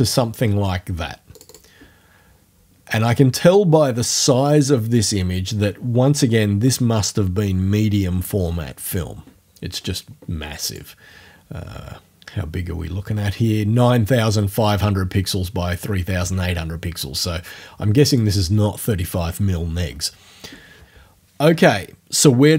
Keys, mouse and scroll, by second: 1.4 click, 10.7 click, 11.8 scroll down 2, 12.4 scroll down 2, 18.1 click.